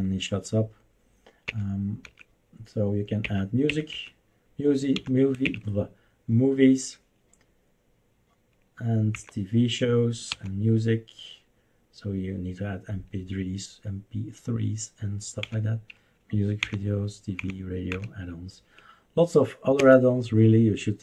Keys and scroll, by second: 1.4 Up, 2.0 Up, 3.2 Up, 3.6 Up, 3.9 Up, 4.9 Down, 5.4 Up, 9.1 End, 9.3 Down, 10.3 End, 10.5 Down, 15.4 End, 15.6 Down, 16.6 Down, 17.3 Down, 17.9 Down, 19.8 Return.